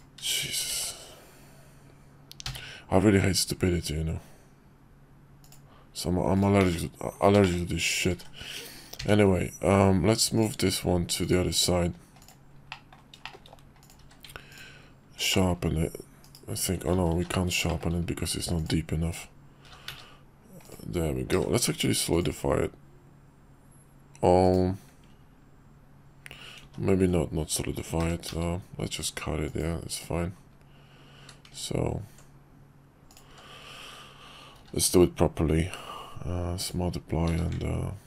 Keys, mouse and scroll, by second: 0.3 shift+click, 0.7 alt+x, 6.3 right click, 6.6 ctrl+z, 7.4 shift+middle click, 8.1 alt+x, 11.2 click, 12.2 click, 12.7 middle drag, 13.3 shift+middle click, 13.8 click, 14.0 q, 15.3 drag, 16.2 /, 17.0 ctrl+z, 17.7 shift+click, 18.6 click, 19.7 g, 21.3 q, 26.7 ctrl+z, 28.0 g, 31.2 q, 33.1 click, 33.3 q, 34.5 q, 37.3 q.